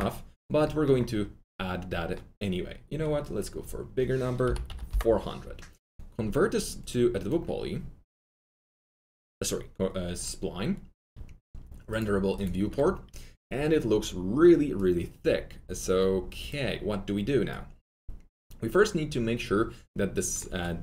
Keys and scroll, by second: 4.6 4, 4.8 Return, 20.4 Delete, 20.4 Return, 20.4 4.